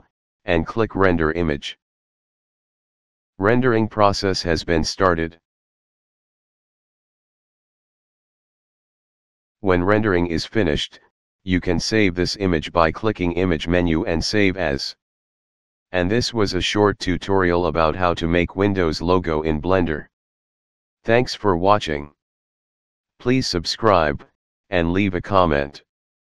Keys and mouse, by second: 1.1 click, 12.8 click.